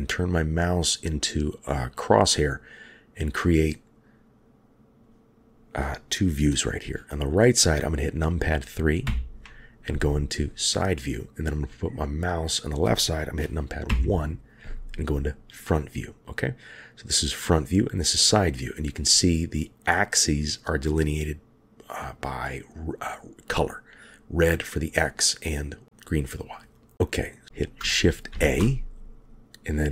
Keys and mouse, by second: 1.9-5.0 drag, 9.0 KP_3, 13.9 KP_1, 28.3 shift+a.